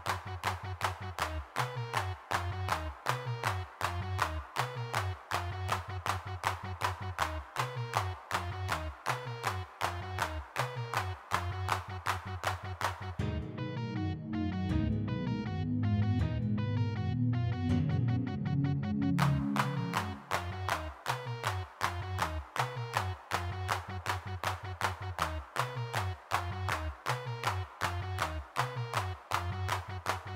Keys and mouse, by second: 0.1-1.6 drag, 1.6 middle click, 2.4 click, 2.9-3.9 middle drag, 3.9 click, 4.0 middle click, 4.6-6.7 drag, 6.7 middle click, 7.0-9.6 drag, 9.6 middle click, 9.7 click, 10.4-11.9 drag, 11.9 middle click, 12.0 click, 12.8 click, 14.0 shift+x, 14.5 shift+c, 16.9 middle click, 17.6 middle click, 18.0 3, 18.4 f, 18.5 click, 19.3-21.0 drag, 21.0 f, 22.6 g, 22.7 f, 24.5 click, 24.7 middle click, 24.8 3, 24.9 f, 26.1 middle click, 27.7-30.3 middle drag.